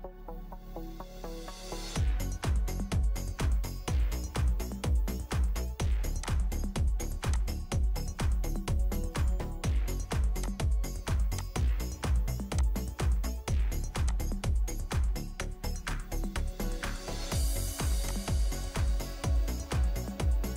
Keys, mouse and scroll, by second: 18.5 scroll up 1, 18.6-19.2 scroll down 1, 19.2-20.0 scroll up 1, 20.0-20.5 scroll down 1.